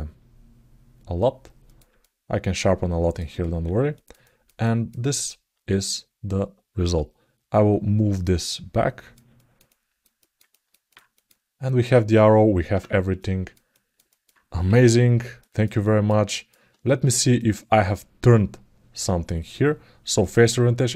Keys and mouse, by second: 1.8-2.9 alt+middle drag, 3.7 alt+middle click, 4.0 ctrl+alt+middle click, 4.4 alt+middle click, 8.0 click, 9.1 ctrl+alt+middle click, 9.9 alt+middle click, 10.2 ctrl+alt+middle click, 10.9 click, 13.0 alt+middle click, 13.5 ctrl+alt+middle click, 13.8 alt+middle click, 15.2 alt+middle click, 15.5 ctrl+alt+middle click, 16.1 alt+middle click, 17.1-20.6 drag, 20.9 alt+middle click.